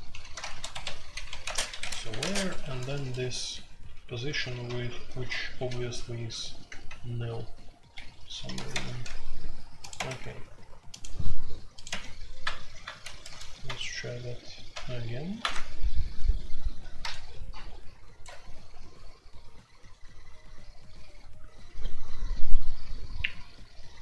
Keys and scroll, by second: 0.0-2.9 typing, 4.6-6.8 typing, 6.0 Escape, 7.9 Escape, 8.3 F2, 8.4-10.5 typing, 11.8 typing, 13.0-13.3 typing, 14.7 alt+p, 15.4 Return.